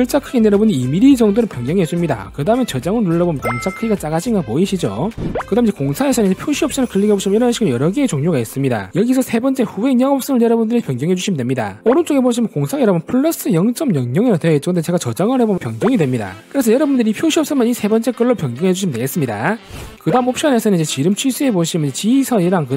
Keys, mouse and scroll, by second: 0.5 click, 1.4 2, 7.6 click, 15.9 click, 18.1 click.